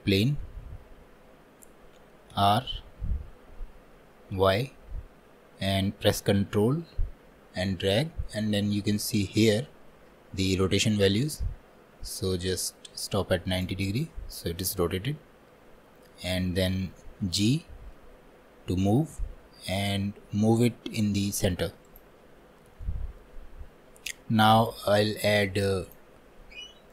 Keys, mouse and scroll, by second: 22.9-25.9 shift+middle drag, 25.9-26.9 drag.